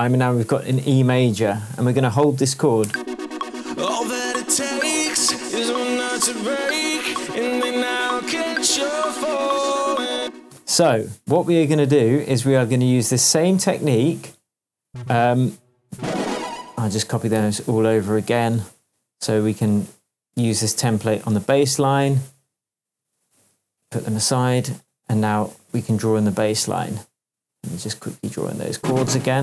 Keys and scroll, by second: 0.7 shift+Tab, 2.8 space, 10.1 space, 17.3 Right, 18.3 shift+Right, 18.4 shift+Tab, 23.8 Left, 25.9 Left, 26.4 shift+Tab, 29.2 Left.